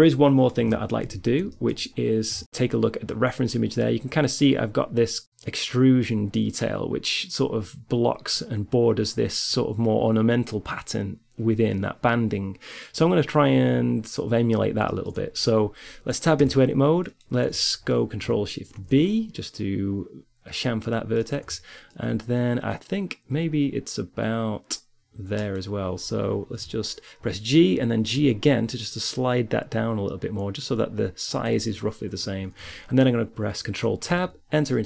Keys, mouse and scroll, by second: 0.2 KP_3, 0.7 z, 1.3-14.8 middle drag, 16.3 Tab, 17.1 click, 19.0 ctrl+shift+b, 19.3 click, 20.7 click, 25.1 right click, 25.3-26.5 middle drag, 26.5 right click, 26.5 g, 33.4 ctrl+Tab.